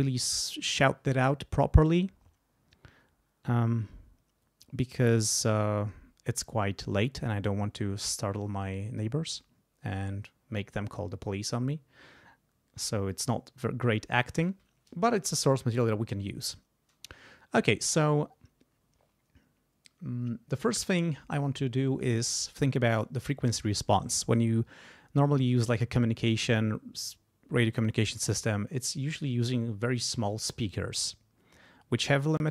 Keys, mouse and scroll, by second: 14.2 click, 15.4 click.